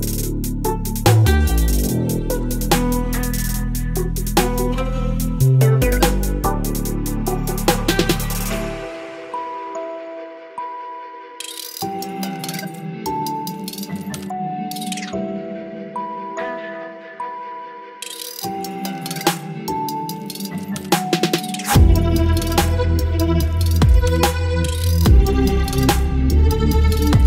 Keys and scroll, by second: 4.6 x, 5.0 ctrl+BackSpace, 5.6 ctrl+d, 20.3 Delete, 20.9 ctrl+d, 22.3 space.